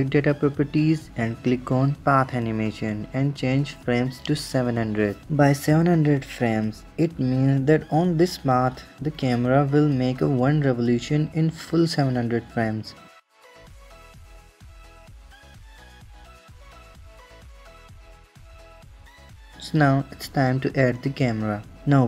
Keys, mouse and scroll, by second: 0.1 click, 0.9-2.3 scroll down 13, 2.6-3.0 drag, 3.6 scroll down 4, 3.6-5.0 drag, 5.0 KP_0, 13.2-18.2 drag, 19.4 click, 20.0 shift+a.